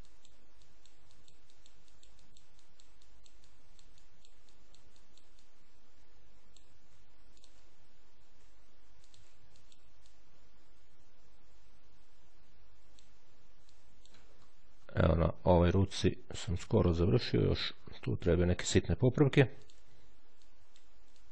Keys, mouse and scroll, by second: 1.0-3.6 drag, 3.9-5.5 drag, 7.2 ctrl+click, 8.9 ctrl+click, 9.9 ctrl+click, 13.5 click, 14.1-15.1 ctrl+scroll down 1, 15.5-15.9 ctrl+scroll down 1, 16.2-17.1 ctrl+scroll up 1, 17.6-18.1 scroll up 1, 18.3-18.7 shift+scroll up 1, 19.5 ctrl+click, 20.3 click.